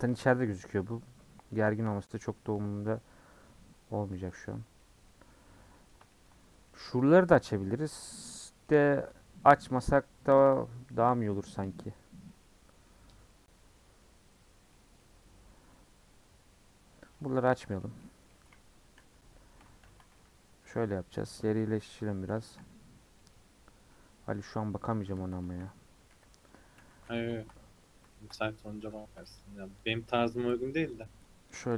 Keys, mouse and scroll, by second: 4.8 middle click, 5.1-5.7 scroll down 7, 5.7 middle click, 6.4 scroll up 2, 6.6-8.1 middle drag, 8.1 scroll down 3, 8.4-17.2 middle drag, 17.2 Tab, 17.6 scroll down 1, 17.8-18.1 middle drag, 18.1 scroll down 1, 18.3-19.0 middle drag, 19.0 /, 19.4-19.8 scroll down 1, 19.8 h, 20.0 scroll down 1, 20.1-20.8 middle drag, 20.8-21.2 scroll down 7, 21.2 middle drag, 21.3-21.9 scroll up 5, 21.9 click, 22.6 /, 23.0 scroll up 3, 23.2-24.2 middle drag, 24.2 Tab, 25.4 KP_1, 25.9 KP_3, 26.8 3, 27.1 alt+z, 27.3 shift+middle click, 27.6-29.4 scroll up 7, 28.1 shift+middle click, 29.4 click, 30.1 shift+click, 30.9 shift+click, 31.5 shift+click.